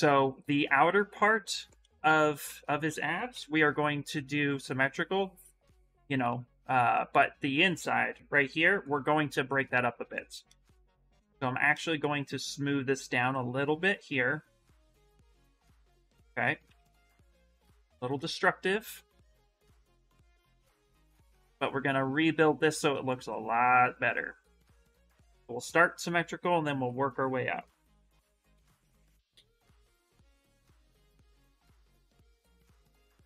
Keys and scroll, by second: 1.8 shift+f, 2.2 shift+f, 3.1 x, 10.7 shift+d, 14.9 d, 16.4 d, 20.3 shift+d, 33.0 shift+d.